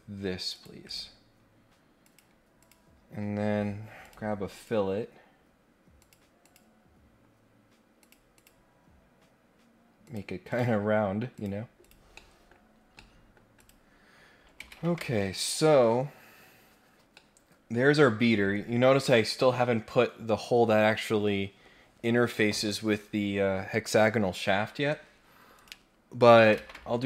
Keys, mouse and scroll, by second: 0.5 click, 0.8 right click, 2.0 click, 2.6 click, 4.0 click, 4.5 click, 6.0 click, 6.4 click, 8.0 click, 8.3 click, 10.0 click, 10.5 click, 11.3 click, 11.8 click, 12.1 middle click, 12.6 scroll down 1, 12.9 middle click, 13.5 click, 17.0 scroll down 1, 17.1 middle click, 18.0-18.4 scroll up 2, 25.1 scroll down 1, 25.5 click.